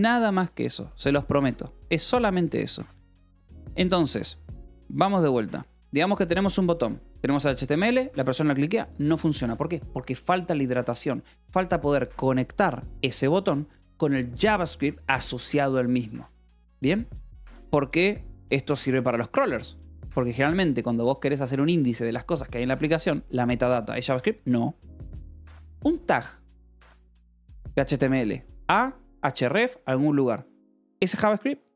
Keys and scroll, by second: 0.0-0.4 typing, 0.7 Return, 1.7 j.